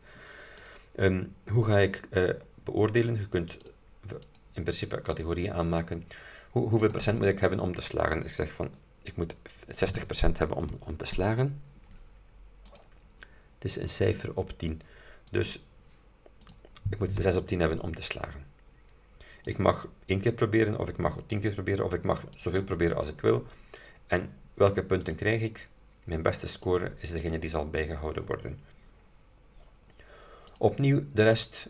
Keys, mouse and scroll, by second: 0.7 click, 1.6-1.9 scroll down 2, 2.5 scroll down 2, 3.7 click, 4.3 click, 6.9 click, 9.9 KP_6, 10.0 KP_0, 12.8 shift+click, 15.4 click, 16.5 click, 17.3 BackSpace, 19.6 click, 22.4 click, 25.1 click, 26.7 click, 27.3 click, 30.0 scroll down 2, 30.6 click, 31.4-31.6 scroll down 2.